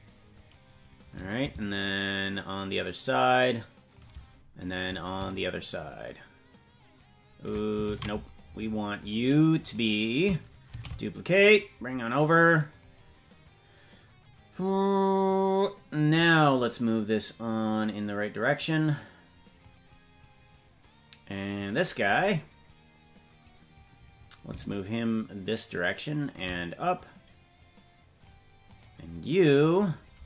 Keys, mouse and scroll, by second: 1.7-4.0 shift+drag, 4.7 right click, 5.7-7.5 shift+drag, 8.2 ctrl+z, 9.0-10.7 right drag, 10.7 shift+d, 17.8-19.6 drag, 21.7 right click, 24.6-26.4 shift+drag, 26.9-28.3 drag, 28.7 right click.